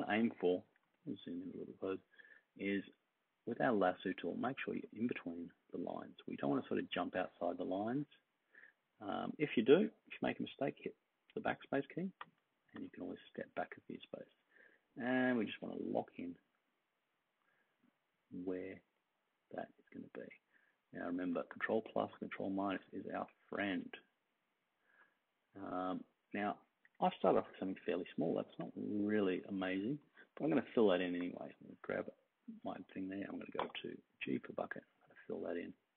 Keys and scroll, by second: 0.5 super+=, 0.6 super+=, 11.3 BackSpace, 12.2 BackSpace, 12.7 BackSpace, 21.1-22.0 space, 26.8 super+-, 27.0 super+-, 28.3-29.7 space, 33.6 g.